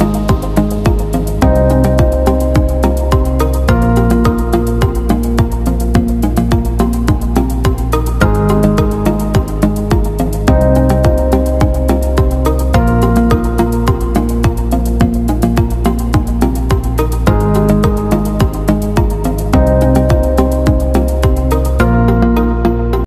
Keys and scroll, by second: 3.3 t, 3.7 ctrl+a, 4.4 ctrl+shift+], 4.6 ctrl+shift+], 4.8 ctrl+shift+], 4.9 ctrl+shift+], 5.0 ctrl+shift+], 5.1 ctrl+shift+], 20.7-21.9 Left.